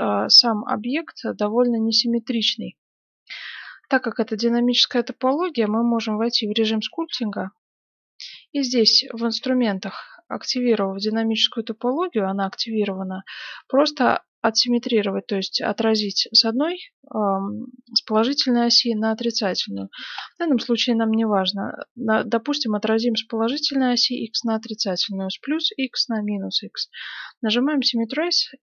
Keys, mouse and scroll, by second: 3.3 right click, 3.6-5.0 middle drag, 4.9 Tab, 7.0 t, 8.8-11.4 drag, 12.8 scroll up 1, 13.0-17.1 middle drag, 14.6-15.1 scroll down 1, 20.1 scroll up 1, 20.3-22.5 middle drag, 27.1-28.6 drag.